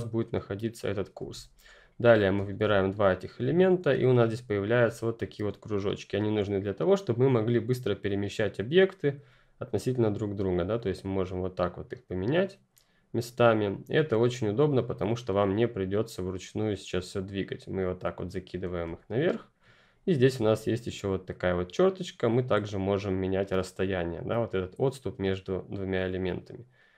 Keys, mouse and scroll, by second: 1.1 ctrl+click, 1.3-2.4 ctrl+scroll up 1, 2.4-3.0 scroll up 2, 3.0 shift+click, 4.5-6.2 ctrl+scroll up 2, 9.2 scroll up 1, 9.2 click, 17.7 click, 18.9-19.5 ctrl+scroll down 1, 19.5-20.4 ctrl+scroll up 1, 20.4 scroll up 1, 21.6 click.